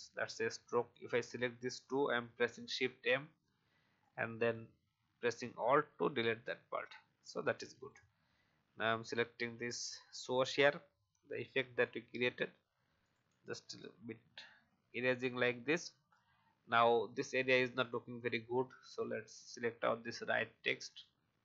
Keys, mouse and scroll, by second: 0.6 click, 2.0 shift+m, 3.1 alt+scroll up 1, 4.0 alt+click, 5.4-5.7 alt+scroll down 1, 6.3 alt+v, 7.2 click, 8.4 shift+e, 13.0 click, 14.5 v, 14.9 click, 15.4-15.8 alt+scroll up 1, 18.1 click.